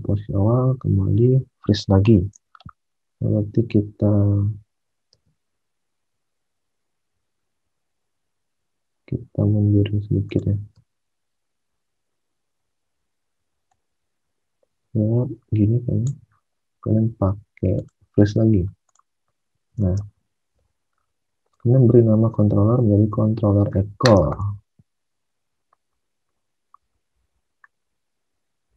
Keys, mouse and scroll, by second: 2.3 alt+Tab, 5.1 space, 7.4 Escape, 10.6 space, 19.8 alt+Tab, 24.1 alt+Tab.